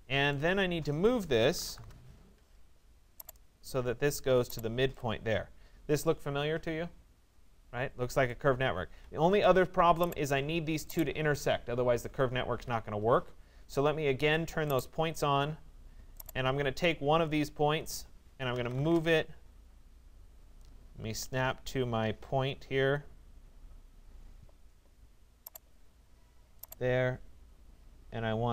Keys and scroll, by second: 8.9 Escape.